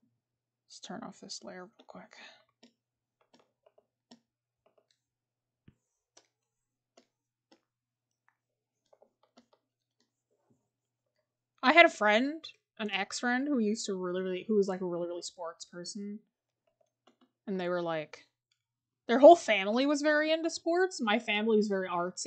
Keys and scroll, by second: 3.2 scroll.